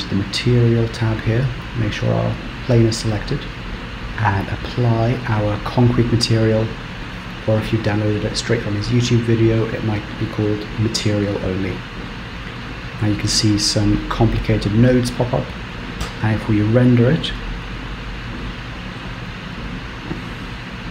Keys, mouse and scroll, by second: 2.4 click, 3.9 click, 14.7-15.2 scroll down 5, 15.2 scroll up 2, 16.5 z.